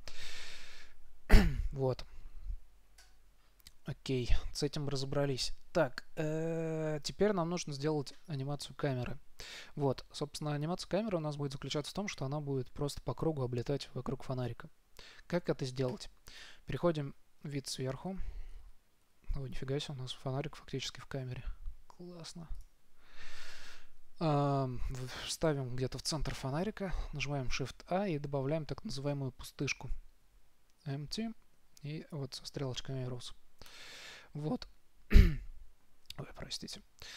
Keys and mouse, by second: 4.1 z, 9.3-16.2 middle drag, 16.2 KP_7, 22.9-24.5 drag, 27.9 shift+a.